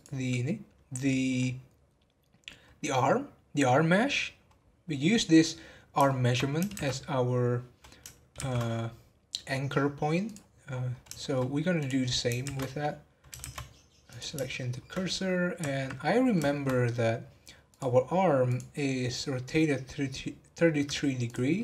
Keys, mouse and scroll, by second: 1.2 scroll down 3, 2.6-4.5 scroll up 2, 4.5 scroll up 6, 6.0-6.7 shift+middle drag, 6.7 shift+a, 10.7 scroll down 2, 11.2-11.7 shift+middle drag, 11.7 click, 12.0 scroll up 2, 12.4 shift+a, 14.6-14.9 shift+middle drag, 14.9 scroll up 1, 15.2-15.9 middle drag, 15.9 scroll up 1, 16.4 shift+middle click, 17.1-17.7 scroll down 1, 17.7 click, 18.5 click, 20.4 scroll down 3, 20.7-21.2 middle drag, 21.2 click, 21.5 middle click.